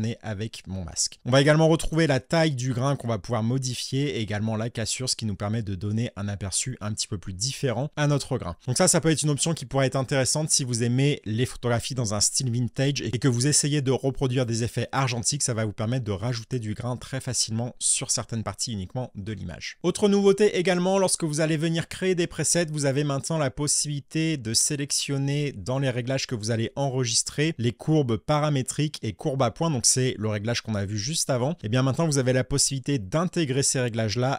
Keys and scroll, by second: 8.3 space, 19.0 Delete.